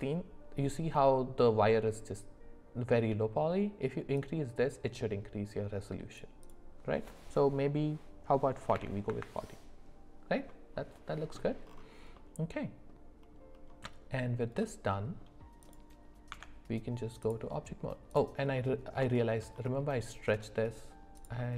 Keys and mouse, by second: 4.3-6.2 drag, 6.5-9.1 drag, 12.1 middle click, 14.6 middle click, 16.3 Tab, 18.1 click, 18.6 middle click, 19.2 shift+middle click, 21.2 click.